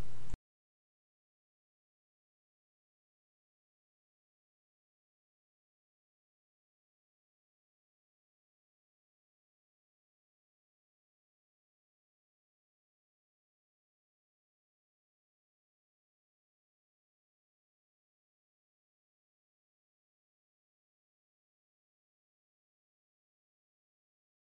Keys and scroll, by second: 5.5 ctrl+g.